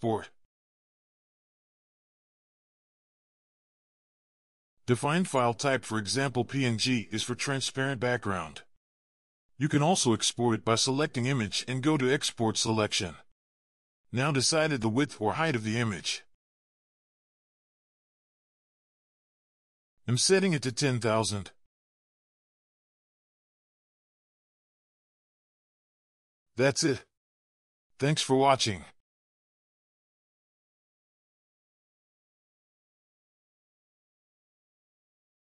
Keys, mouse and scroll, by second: 0.0 right click, 12.0 right click, 23.5-24.1 typing, 28.3 double click, 29.9 alt+scroll up 1, 30.9 right click.